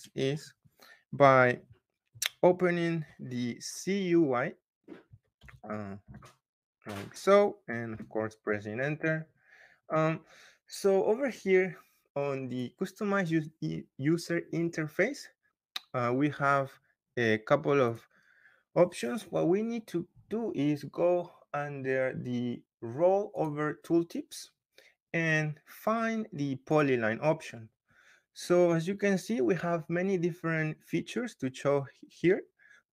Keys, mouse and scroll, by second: 0.2 middle click, 4.6 scroll, 4.9-5.9 typing, 7.8 Return, 13.2 click, 17.8 click, 23.3 click, 26.7 click.